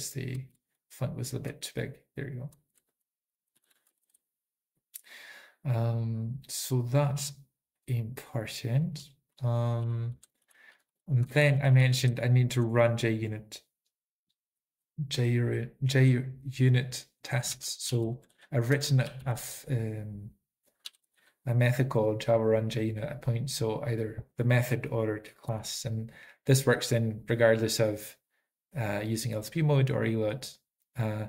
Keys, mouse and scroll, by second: 0.0-0.3 typing, 2.6-3.3 typing, 3.7 ctrl+k, 4.0 ctrl+s, 10.2 ctrl+p, 10.2 ctrl+n, 10.9 ctrl+p, 10.9 ctrl+k, 11.5 ctrl+a, 11.5 ctrl+s, 11.5 ctrl+p, 11.8 ctrl+p, 12.1 ctrl+p, 17.5 ctrl+n, 17.5 alt+f, 17.9 alt+f, 19.0 alt+b, 19.0 alt+x, 20.5-21.3 typing, 25.2-25.9 typing, 27.5 Return, 27.5-27.9 typing, 30.7 click.